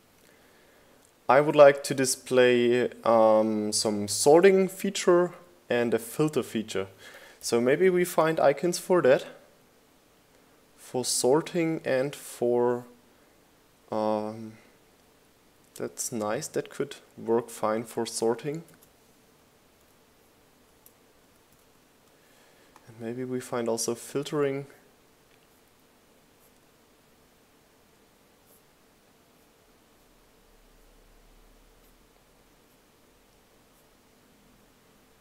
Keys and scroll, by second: 0.9 shift+g, 1.9 Return, 21.0 super+c, 22.6 super+v.